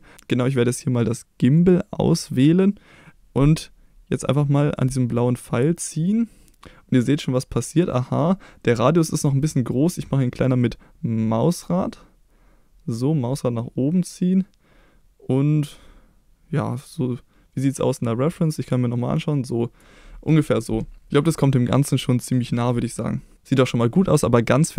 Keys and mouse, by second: 4.9-19.8 drag, 20.7 middle click, 21.4 middle click, 22.1 middle click, 24.6-24.7 middle drag.